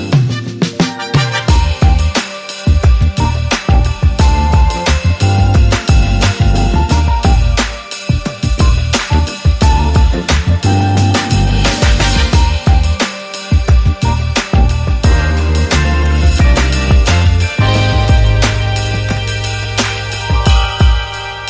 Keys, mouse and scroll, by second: 5.4 F9, 15.5 Home.